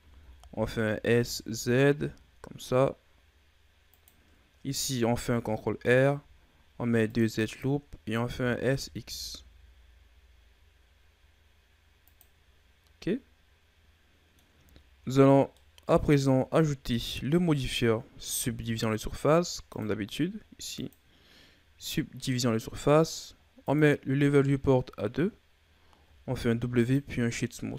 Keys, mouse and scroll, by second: 5.1 ctrl+r, 13.8 middle click, 14.7-15.6 shift+scroll down 4, 15.6-18.4 middle drag, 18.4 Tab, 19.7 click, 23.6 click, 26.1 w.